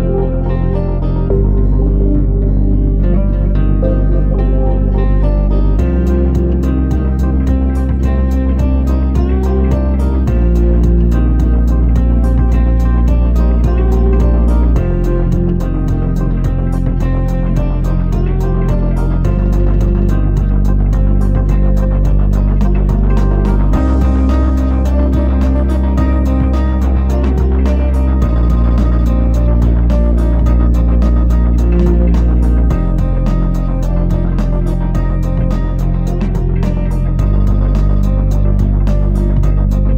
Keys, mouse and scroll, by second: 0.7 shift+a, 10.8 scroll up 2, 12.5-13.7 scroll up 1, 12.5 r, 16.1 r, 20.4 KP_7, 22.0 g, 27.6 KP_Decimal, 28.6-28.9 scroll up 4, 29.1 shift+middle click, 30.0 click, 32.5 scroll down 4, 33.9 scroll down 3, 33.9 KP_3, 34.7-35.2 scroll down 3, 35.3 shift+middle click, 36.6 s, 39.6 g.